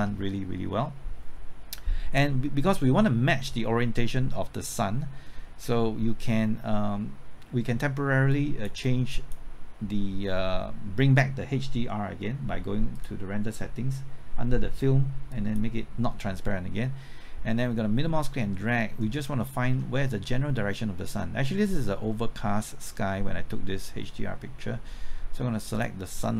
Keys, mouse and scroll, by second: 17.9-19.3 middle drag, 20.6-25.1 middle drag, 25.7-26.3 drag.